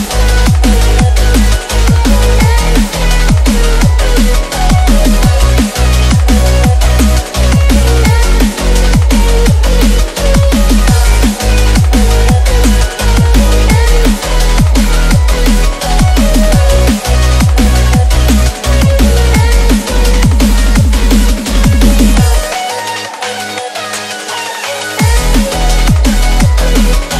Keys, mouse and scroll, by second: 0.0-2.4 typing, 4.1 click, 5.4-5.8 shift+drag, 8.7 Left, 9.1 Down, 9.8 click, 11.0-12.5 typing, 13.9-24.5 typing, 18.3 shift+Return, 26.2 shift+Return, 26.7-27.1 typing.